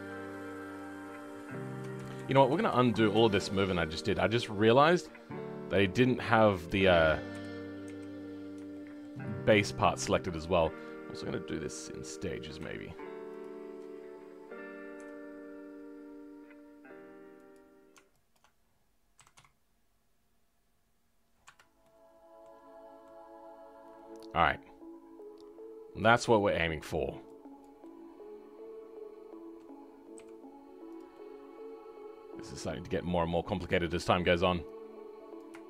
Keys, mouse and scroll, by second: 0.1-1.9 middle drag, 1.9 ctrl+z, 2.1 ctrl+z, 4.1-7.3 middle drag, 7.3 KP_3, 8.3-8.7 scroll up 1, 8.7-12.1 shift+middle drag, 12.1 click, 21.8 middle click, 22.6-23.0 scroll down 2, 23.0-30.1 middle drag, 31.1-32.9 middle drag, 32.9-33.2 scroll up 1, 33.3-35.3 middle drag, 35.3 click.